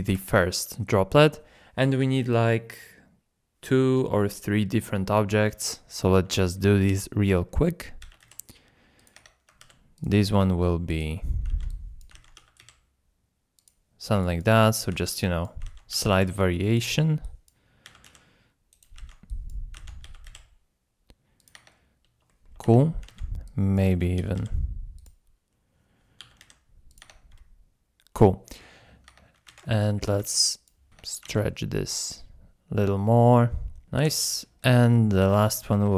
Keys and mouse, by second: 0.1 KP_7, 6.3 shift+drag, 6.6 middle click, 7.2 shift+middle drag, 8.0 shift+d, 8.2 x, 9.0 click, 9.2 Tab, 11.5 alt+z, 11.8 ctrl+click, 12.3 s, 12.6 x, 13.6 click, 14.1 click, 15.0 alt+z, 15.1 click, 15.9 s, 16.2 x, 16.7 click, 17.8 s, 18.1 x, 18.7 click, 19.1 alt+z, 19.4 click, 20.0 s, 20.3 x, 21.4 click, 21.5 Tab, 22.3 shift+middle drag, 22.6 Tab, 23.2 alt+z, 23.7 click, 24.2 s, 24.4 x, 25.0 click, 26.2 s, 26.5 x, 26.9 click, 27.2 Tab, 29.1 Tab, 29.6 alt+g, 30.0 alt+z, 30.5 click, 30.9 g, 30.9 y, 31.1 Tab, 31.2 alt+z, 31.8-34.4 drag, 34.7 KP_7, 35.2 shift+a.